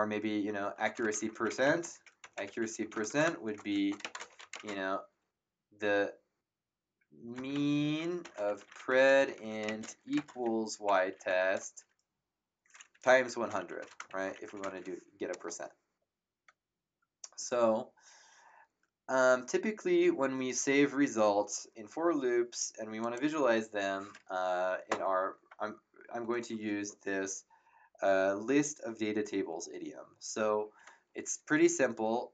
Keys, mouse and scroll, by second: 0.0-4.5 typing, 7.1-11.8 typing, 12.9 End, 13.3-14.9 typing, 23.0 click, 24.9 Return, 24.9 KP_Enter.